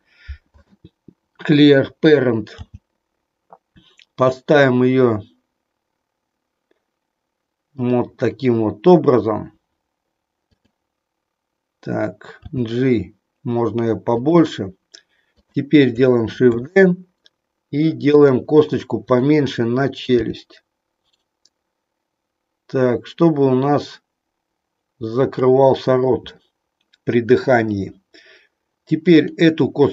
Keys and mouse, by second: 2.6 g, 7.8 click, 10.5 click, 12.3 g, 16.5 shift+d, 19.0 click, 20.1 g, 25.2 click, 29.1 click.